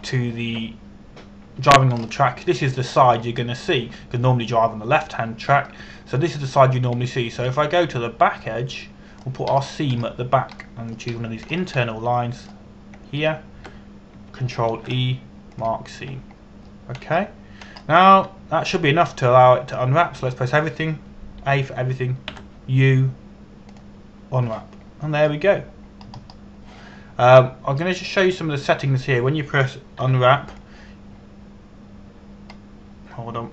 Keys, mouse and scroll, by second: 0.4 scroll down 1, 3.6 scroll up 1, 4.9 scroll down 1, 8.8 middle click, 11.2 scroll up 1, 12.2 middle click, 12.8-13.4 scroll up 2, 13.2 middle click, 13.4 middle click, 14.8 shift+right click, 16.4 ctrl+e, 17.2 click, 17.6 a, 18.0-18.7 scroll down 1, 19.8 a, 20.5 a, 21.8 a, 24.0 u, 25.3 click, 26.4-27.7 scroll down 1, 27.7-30.0 scroll up 1, 30.0 click, 31.7 u, 32.1 click.